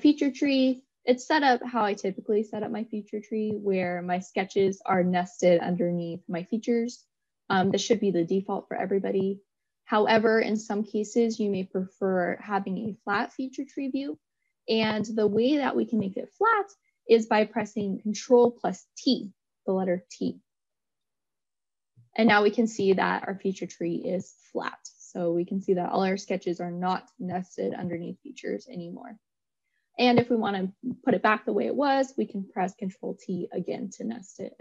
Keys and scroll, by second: 18.3 ctrl+t.